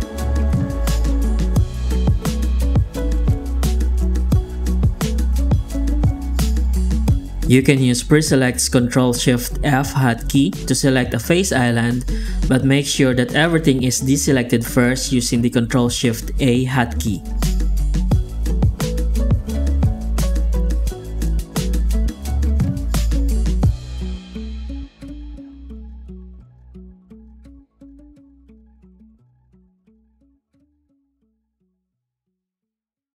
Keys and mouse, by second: 2.6 alt+a, 4.9 click, 5.3 Tab, 5.6 alt+a, 6.0 ctrl+shift+f, 6.2 Tab, 6.6 shift+q, 9.3 alt+a, 11.3 ctrl+shift+f, 11.7 ctrl+shift+a, 12.0 ctrl+shift+f, 12.5 shift+q, 14.1 alt+a, 14.8 ctrl+shift+f, 15.2 ctrl+shift+a, 15.5 ctrl+shift+f, 15.8 shift+q, 17.6 alt+a, 18.3 click, 18.8 ctrl+shift+a, 19.0 ctrl+shift+f, 19.4 shift+q, 21.3 alt+a, 23.2 click, 23.7 ctrl+shift+a, 23.9 ctrl+shift+f, 24.3 shift+q, 26.4 alt+a, 28.0 right click, 28.6 ctrl+shift+a, 28.7 ctrl+shift+f, 29.1 shift+q, 31.5 alt+a, 31.7 click, 32.2 shift+g, 33.0 Tab.